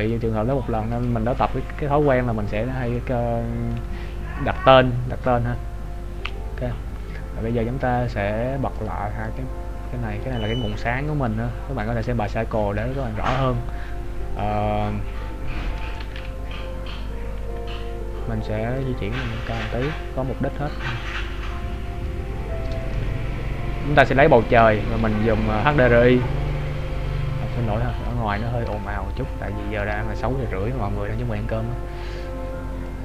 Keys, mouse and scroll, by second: 2.1-2.8 scroll down 3, 3.2 middle click, 3.8 KP_3, 4.7-5.0 scroll down 1, 6.3 scroll up 2, 7.0 scroll down 1, 7.2-8.1 scroll down 6, 8.8 click, 10.0 scroll down 1, 10.4 right click, 10.9 middle click, 12.9 KP_3, 14.4-16.0 scroll up 1, 16.0 a, 16.4 a, 16.9-17.6 scroll down 1, 17.6 a, 19.3 click, 20.1 click, 21.1 click, 23.1 shift+middle click, 25.9 click, 29.2 shift+middle click.